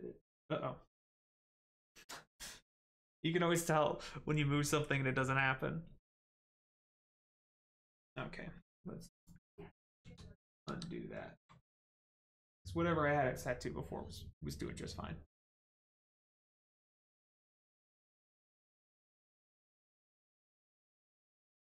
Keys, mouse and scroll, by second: 9.2 click, 9.6 middle click, 10.0 ctrl+z, 11.6 middle click.